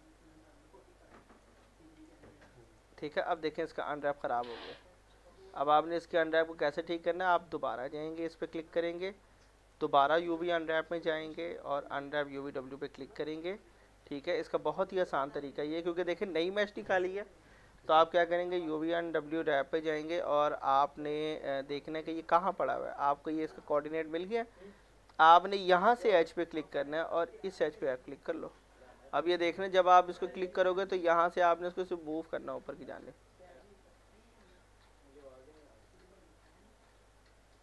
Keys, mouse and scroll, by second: 0.5 alt+middle click, 1.1 alt+scroll up 1, 1.6 alt+middle click, 2.6 click, 2.9 z, 3.5 alt+middle click, 5.7 click, 6.7 scroll down 1, 6.9 alt+middle click, 7.3-7.9 scroll up 1, 7.9 click, 10.5 u, 12.3 click, 14.2 ctrl+a, 14.6 alt+middle click, 15.0 scroll up 1, 18.7 click, 22.2 click, 23.5-24.6 scroll up 1, 25.7 click, 26.5 middle click, 27.7 click, 28.5 middle click, 29.0-29.4 scroll up 1, 29.4 middle click, 30.8 click, 33.1 scroll, 33.2 middle click, 35.9-37.6 drag.